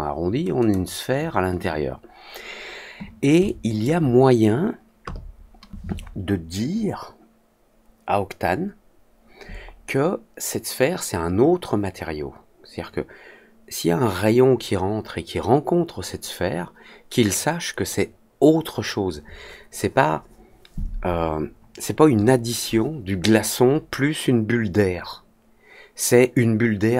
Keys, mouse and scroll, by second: 0.5 click, 3.4-3.8 alt+drag.